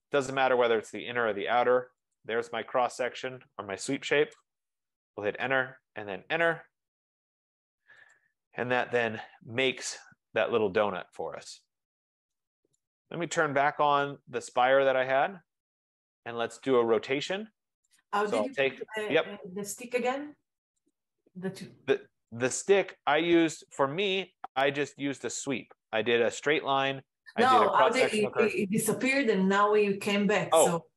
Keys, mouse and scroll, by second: 0.2 click, 2.3 click, 4.3 Return, 5.0 double click, 5.5 Return, 8.2 click, 9.0 click, 9.6 scroll, 13.0 right click, 13.3-14.5 typing, 14.7 Return, 15.3-15.6 scroll, 16.1 scroll, 17.0 typing, 18.1 click, 21.0 click, 21.8 scroll down 3, 22.6 click, 23.7 click, 23.9-24.4 scroll, 25.0 scroll, 25.9-26.4 scroll, 27.4 scroll, 27.8 click, 28.7 click, 29.3 scroll.